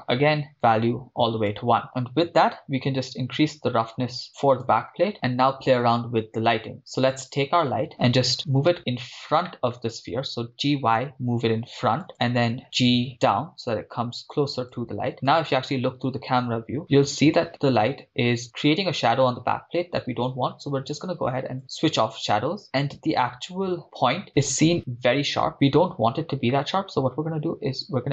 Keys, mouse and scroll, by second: 2.3-2.6 scroll down 4, 2.6-4.8 drag, 7.0 click, 8.8 KP_0, 9.5 middle click, 10.6 g, 10.8 y, 12.1 click, 12.6 g, 14.6-15.2 drag, 15.2 KP_0, 16.9 g, 18.3 click, 21.6 click, 23.4-24.3 scroll up 6, 25.5-26.0 scroll down 3, 27.9-28.1 drag.